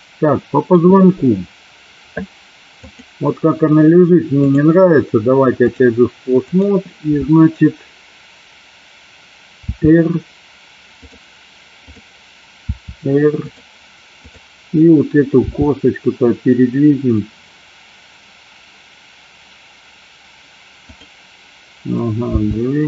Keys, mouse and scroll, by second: 4.4-6.0 drag, 9.8 r, 11.9 click, 12.7 r, 14.2 click, 15.5 r, 22.5 g.